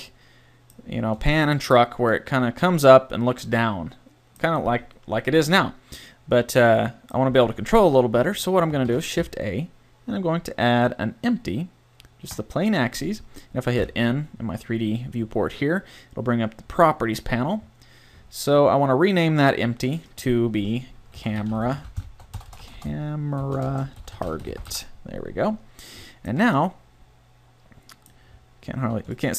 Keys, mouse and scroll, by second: 8.9 shift+a, 13.8 n, 22.6 BackSpace, 22.8 BackSpace, 28.9 a.